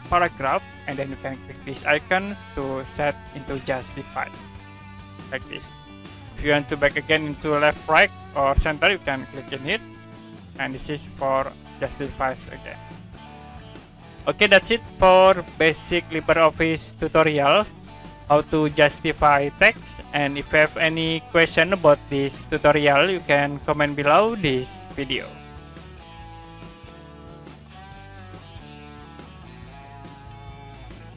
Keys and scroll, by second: 0.1 ctrl+a, 26.3 Print.